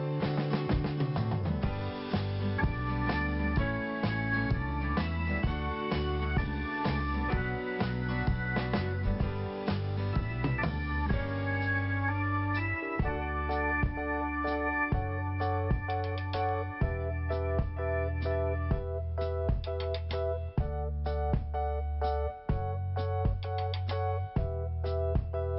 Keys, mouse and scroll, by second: 1.4 click, 1.5 click, 2.2 scroll down 1, 3.5 f, 4.3 scroll up 1, 6.6 click, 6.6 click, 12.6 click, 12.7 click, 13.4 click, 13.5 click, 18.4 click, 18.5 click, 22.2 right click, 23.2 click, 24.1 p.